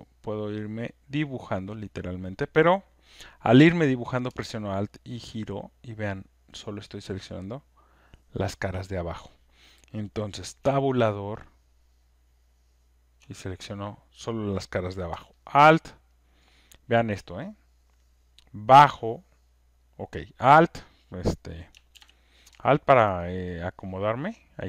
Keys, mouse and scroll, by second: 1.5 click, 1.7 Tab, 9.2 alt+click, 10.6 Tab, 11.1-13.1 Tab, 13.1 click, 13.2 Tab, 15.9 alt+click, 16.5 alt+right click, 16.9 alt+click, 19.8 click, 22.0 ctrl+z, 23.1 alt+right click.